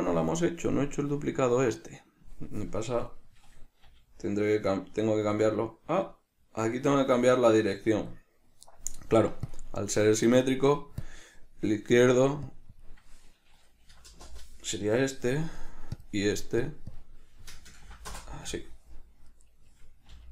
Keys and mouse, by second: 3.3 right click, 4.1 g, 8.2 click, 8.4 right click, 9.7 click, 11.3 drag, 12.7-16.3 drag, 14.4 Return, 16.8-19.5 drag, 18.4 Return, 19.5 right click.